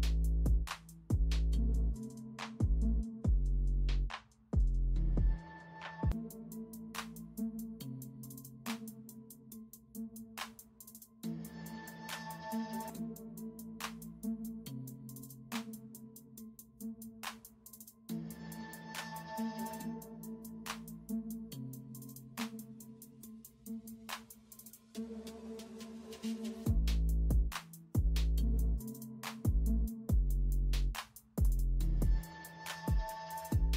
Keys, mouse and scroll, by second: 0.0 shift+click, 0.9 shift+click, 1.0 alt+shift+scroll down 1, 1.2 shift+click, 1.5 shift+scroll down 2, 2.0 shift+click, 4.1 shift+click, 5.1 shift+click, 6.0 shift+click, 6.3 shift+double click, 10.2 alt+scroll up 1, 11.5-11.8 alt+scroll up 1, 11.9 ctrl+e, 12.2 alt+scroll up 1, 13.0 b, 14.3 typing, 17.3 space, 20.3-23.3 typing, 26.5-27.3 typing, 29.7-31.1 typing.